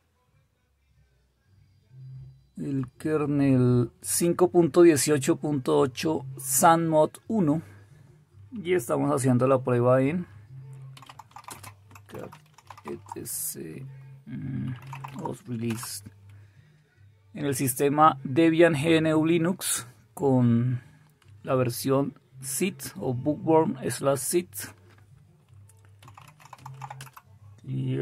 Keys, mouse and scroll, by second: 10.6-13.2 typing, 14.6-16.9 typing, 26.0-28.0 typing.